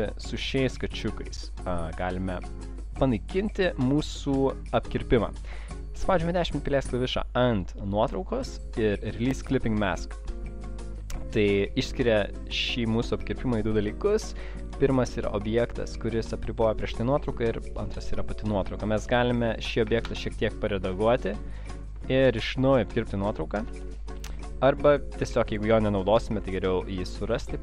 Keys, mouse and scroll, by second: 1.7 click, 3.0 click, 3.5 double click, 5.0 right click, 9.2 click, 15.2 click, 19.6 click, 20.1 click, 21.4 shift+click, 22.2 right click, 23.6 ctrl+z, 23.6 click, 26.8 click.